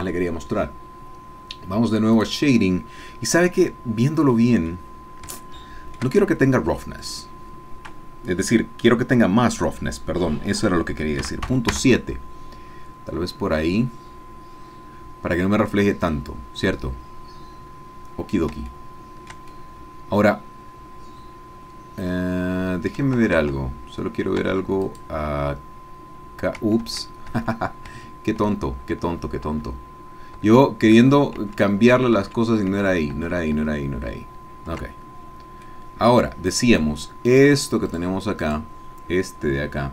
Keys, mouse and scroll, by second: 2.1 click, 4.3 middle click, 4.8-5.4 scroll up 3, 5.4 shift+middle click, 7.0-11.2 drag, 11.2 KP_Decimal, 11.4 KP_7, 11.7 KP_Enter, 12.9-13.9 scroll down 3, 13.6 middle click, 18.8 shift+click, 19.6-23.1 shift+drag, 23.5 Tab, 24.5 Tab, 24.8 click, 26.9 ctrl+z, 30.9 ctrl+z, 35.7-37.0 drag, 37.4 click, 37.9 click, 38.4 click.